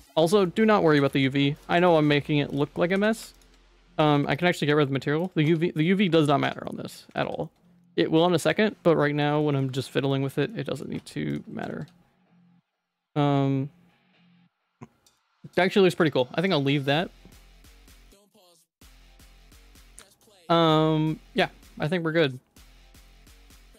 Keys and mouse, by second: 0.2 middle click, 0.8 g, 2.2 shift+middle click, 2.8 g, 3.6 Tab, 4.1 ctrl+s, 4.4 click, 5.2 click, 5.4 Tab, 6.0 a, 6.4 Tab, 6.6 middle click, 7.2 ctrl+s, 7.5 middle click, 8.3 middle click, 9.0 middle click, 9.4 shift+middle click, 9.7 middle click, 9.9 middle click, 10.2 Tab, 10.5 middle click, 10.9 2, 11.3 click, 11.7 ctrl+x, 13.0 Tab, 14.1-15.1 middle drag, 15.3 ctrl+s, 15.6 shift+middle click, 16.4 middle click, 18.4-20.2 middle drag, 21.8 middle click.